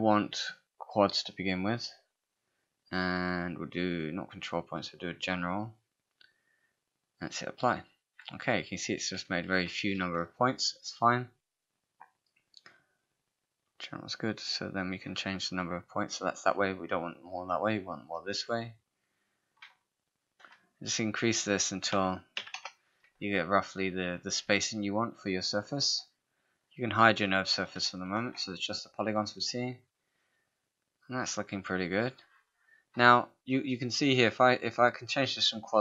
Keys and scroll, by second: 10.0 ctrl+a, 21.9 6, 22.4 4, 22.6 Return, 28.0 ctrl+h.